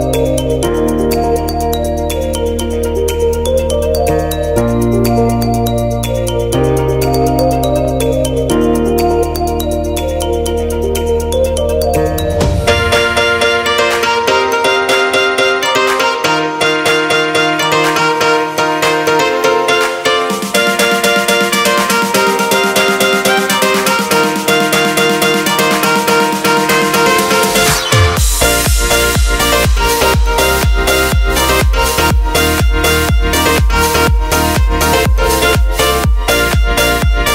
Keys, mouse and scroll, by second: 0.3 middle click, 0.8 shift+middle click, 1.6 click, 5.9 click, 8.8 alt+a, 9.2 shift+middle click, 11.9 shift+middle click, 13.9 click, 14.8 click, 17.5 KP_Decimal, 18.2 shift+middle click, 18.7 middle click, 19.5 shift+middle click, 23.2 click, 27.7 click, 28.9 e, 30.8 middle click.